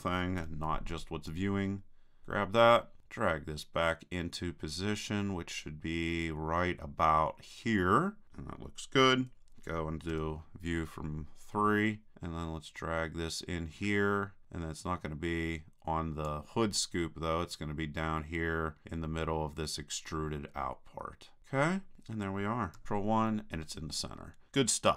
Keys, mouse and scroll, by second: 0.4 b, 3.0-4.7 drag, 10.1 KP_3, 12.1-13.6 drag, 17.6-19.2 drag, 22.8 ctrl+KP_1, 24.8 click.